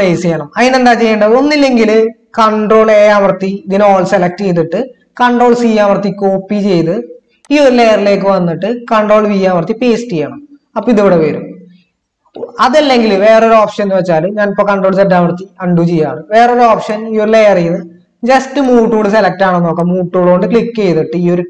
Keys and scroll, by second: 3.0 ctrl+a, 5.5 ctrl+c, 9.6 ctrl+v, 14.8 ctrl+z.